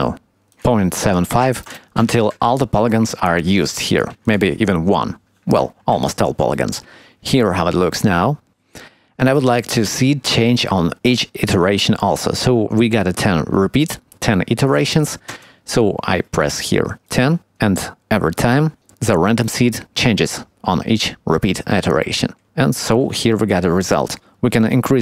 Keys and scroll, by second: 2.2 Tab, 6.9 Tab.